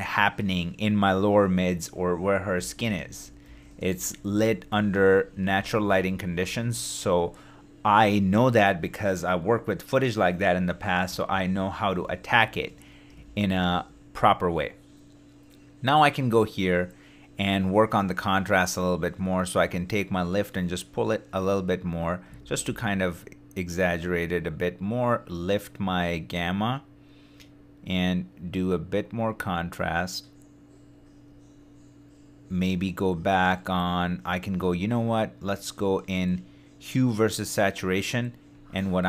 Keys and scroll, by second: 11.3 shift+d, 22.4 shift+d.